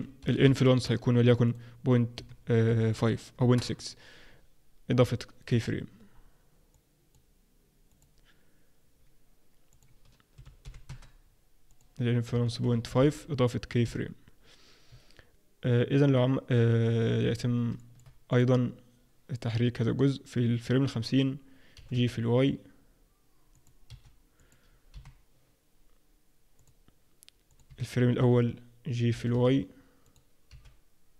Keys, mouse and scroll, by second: 1.4 click, 6.7 click, 7.8 click, 11.6 click, 13.8 i, 17.4 scroll down 2, 17.7 shift+middle click, 18.3 click, 21.7 g, 23.8 g, 24.9 i, 27.5 click, 29.1 g, 30.4 g.